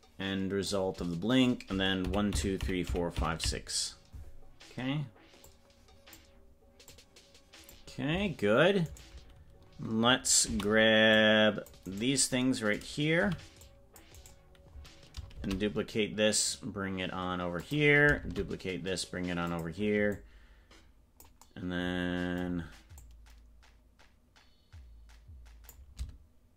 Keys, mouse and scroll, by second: 2.2-4.2 Left, 5.4 click, 6.8-8.1 drag, 8.8 right click, 10.4 c, 11.9 right click, 13.2 c, 15.4 shift+d, 20.2-21.4 drag, 23.1-25.9 drag.